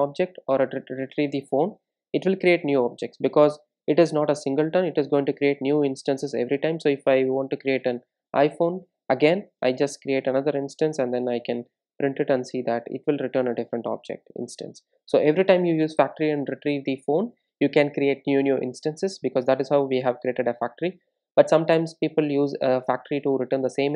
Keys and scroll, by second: 6.7 super+d, 11.6 super+d, 14.3 super+r.